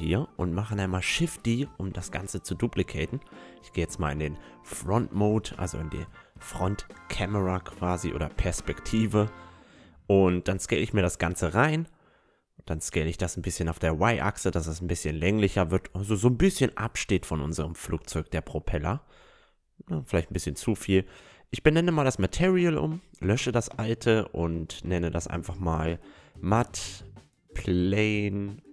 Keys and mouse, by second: 0.9 shift+d, 2.1 KP_1, 3.5 KP_1, 3.5 KP_4, 4.7-6.4 drag, 7.8 s, 10.1-12.5 middle drag, 13.0 s, 15.1-17.1 drag, 18.8 s, 20.0-26.8 drag.